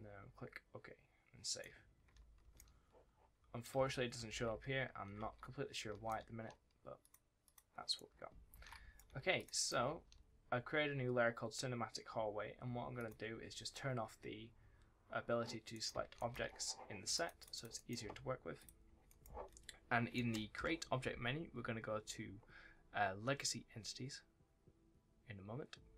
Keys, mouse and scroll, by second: 1.2 click, 1.3-5.1 typing, 1.9 scroll down 1, 2.4 scroll up 1, 3.5 right click, 3.7-4.2 scroll up 1, 4.2 scroll down 1, 4.7 scroll up 1, 5.0 scroll down 1, 5.7-6.1 scroll down 1, 6.1 w, 6.9 click, 7.8-9.6 typing, 7.8 right click, 9.3 click, 9.5 right click, 15.6 right click, 15.8 w, 16.1 right click, 17.0 click, 17.3 double click, 17.6 right click, 17.9 w, 18.5 click, 19.0 right click, 19.1 s, 20.0 right click, 20.5 ctrl+s.